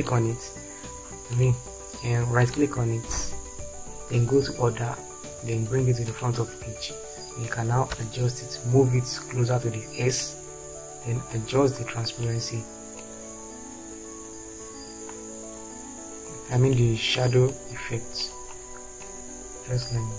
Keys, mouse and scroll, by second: 8.3 Right.